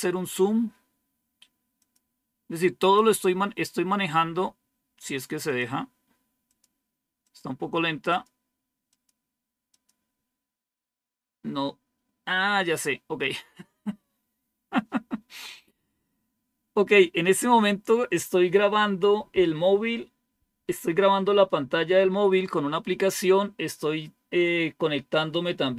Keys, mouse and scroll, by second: 1.7 click, 2.7 click, 5.4 click, 6.1 click, 6.4 click, 6.7 click, 7.1 click, 8.0 click.